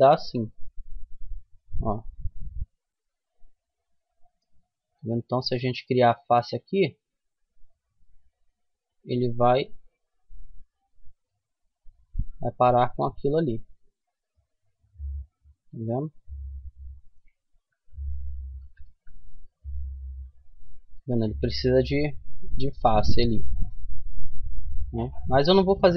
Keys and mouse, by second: 4.3-5.9 right drag, 5.9-7.6 middle drag, 8.7 right click, 9.9 f, 10.6-11.9 middle drag, 11.6 Tab, 12.0 middle click, 13.8-16.2 middle drag, 16.6-20.2 middle drag, 18.1 Tab, 20.8-24.3 middle drag, 24.3 ctrl+z, 24.7 ctrl+z, 25.0 ctrl+z, 25.4 ctrl+z, 25.8 ctrl+z.